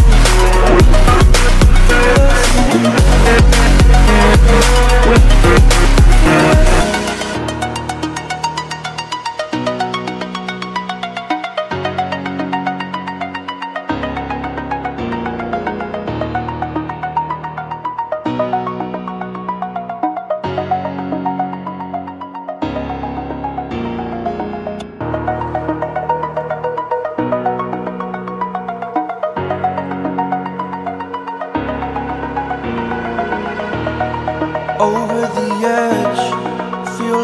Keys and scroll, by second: 3.5 ctrl+t, 7.2 ctrl+i, 15.0 shift+F5, 28.6 ctrl+z, 32.9 ctrl+z.